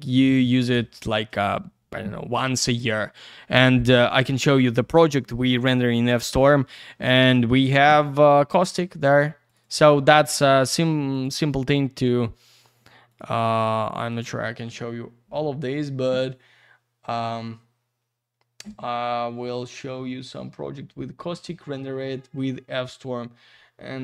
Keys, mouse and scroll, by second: 6.1 click, 6.2 click, 7.2 click, 7.3 click, 8.6 click, 8.7 click, 9.5 click, 9.7 click, 10.6 click, 10.7 click, 11.1 click, 11.2 click, 11.4 double click, 12.7 click, 12.8 click, 13.1 click, 13.2 double click, 14.1 click, 14.8-15.6 scroll down 1, 15.6-16.2 scroll up 1, 16.2-18.2 scroll down 1, 22.8-24.0 scroll up 1.